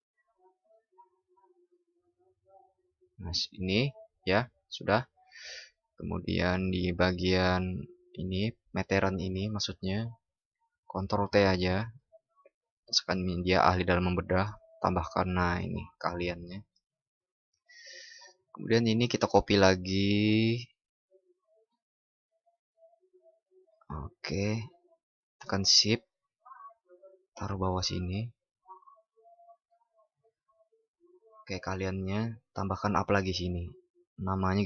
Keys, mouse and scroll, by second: 19.7 ctrl+?, 22.2 ctrl+shift+i.